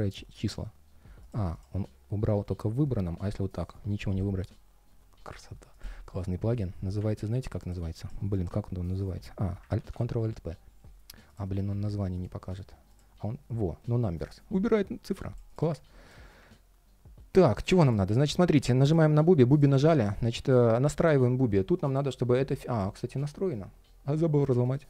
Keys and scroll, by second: 3.8 super+/, 9.6 alt+super+p.